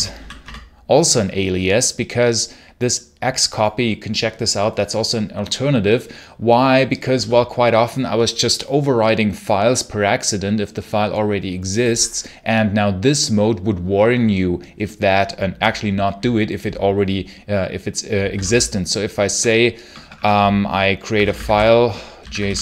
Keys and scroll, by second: 0.0-0.3 typing, 0.3 Return, 17.8-22.6 typing.